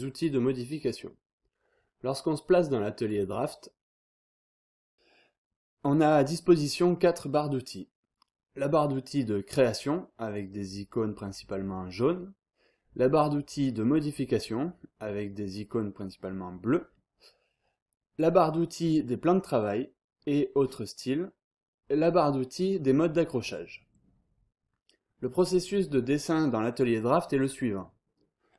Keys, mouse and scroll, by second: 3.1 click, 3.8 click.